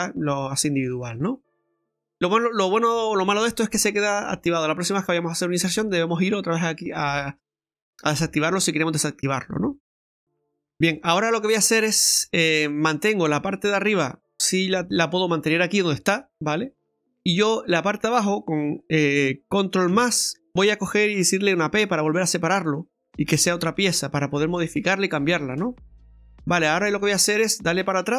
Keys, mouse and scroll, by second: 9.9 click, 14.6 right click, 17.5 right click, 19.9 ctrl+KP_Add, 21.6 p, 23.6 Tab, 24.1 right click, 24.7 middle click, 25.6 scroll up 1, 25.8-26.2 scroll down 1, 26.2 middle click, 26.8-27.7 scroll down 2, 28.1 click.